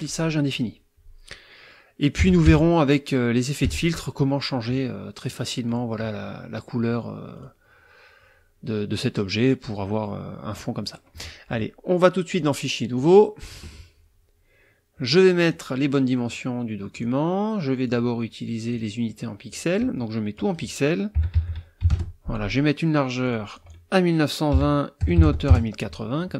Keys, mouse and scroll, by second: 2.2 -, 3.6 KP_Subtract, 4.7 middle click, 5.7 click, 7.3 click, 12.3 click, 12.9 click, 15.5 click, 16.9 click, 17.8 click, 18.7 click, 19.5 click, 20.3 click, 21.2 KP_1, 21.3 KP_9, 21.8 KP_2, 21.9 KP_0, 23.2 click, 24.5 KP_1, 25.0 KP_0, 25.1 KP_8, 25.2 KP_0, 25.5 KP_Enter.